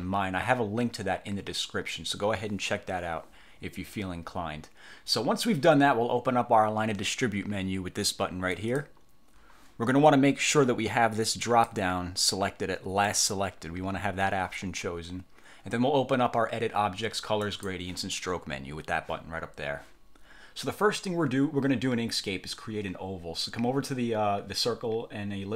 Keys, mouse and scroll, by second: 8.7 click, 11.5 click, 13.1 click, 17.5 click.